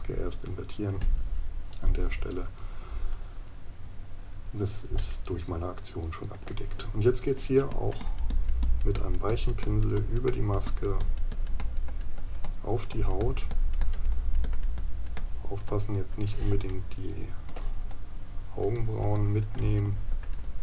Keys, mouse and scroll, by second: 5.1 right click, 16.7 right click.